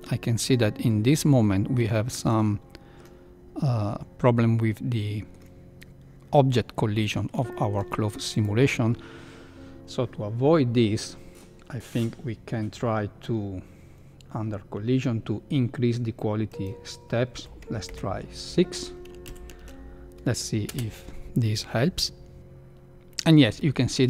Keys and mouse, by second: 0.1 middle drag, 1.1 middle click, 2.1 shift+middle click, 2.4 middle click, 4.6 middle click, 7.0 middle click, 7.6 shift+middle click, 8.0 middle drag, 8.3 click, 16.6 click, 19.4 shift+Left, 20.6 space.